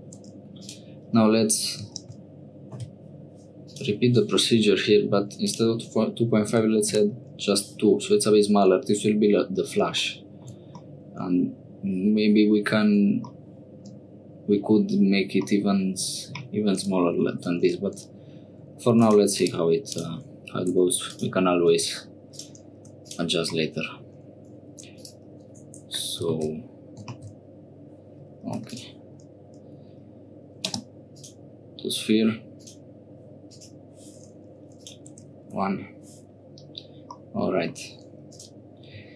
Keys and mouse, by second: 0.2 1, 0.6 click, 2.0 ctrl+b, 5.4-7.5 drag, 10.8-12.6 middle drag, 15.5 click, 19.0 3, 19.0 click, 20.7 1, 21.0 click, 21.7 x, 22.8 3, 23.0 click, 23.5 middle click, 25.9 right click, 26.3 ctrl+z, 26.4 right click, 27.1 ctrl+z, 27.2-28.6 right drag, 28.6 3, 28.6 click, 30.7 space, 34.7-35.8 drag, 37.2 middle click, 38.3 click.